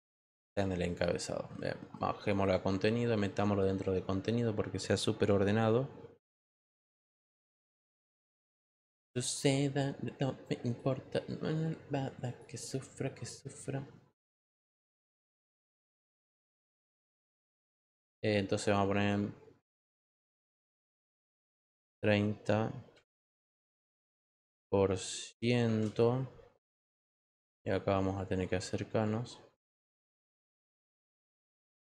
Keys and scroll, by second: 21.0 3, 21.6 9, 25.6 shift+5.